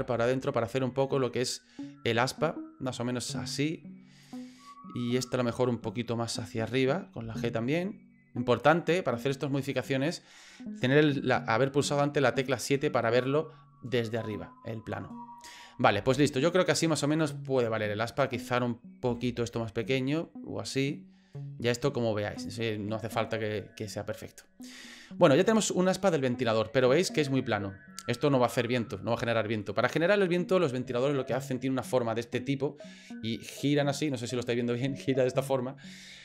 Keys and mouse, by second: 5.1 right click, 7.2 g, 18.1 right click, 19.1 g, 25.3-28.7 middle drag.